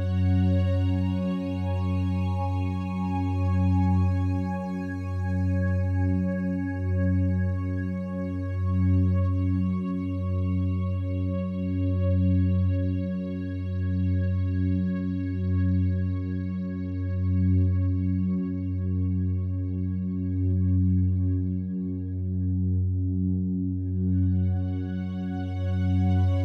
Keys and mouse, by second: 4.0-5.0 alt+shift+drag, 5.3 ctrl+alt+click, 5.6 ctrl+alt+click, 6.7 ctrl+alt+click, 7.3 ctrl+alt+click, 7.3 typing, 8.5-10.3 drag, 10.7-11.7 drag, 12.3 click, 12.7 alt+click, 13.8 alt+click, 13.9 click, 14.6 click, 14.7 click, 14.8 typing, 16.1 typing, 18.0 click, 18.6 click, 18.9 shift+click, 19.3 alt+click, 20.6 typing, 22.4 click, 22.8-26.4 alt+drag.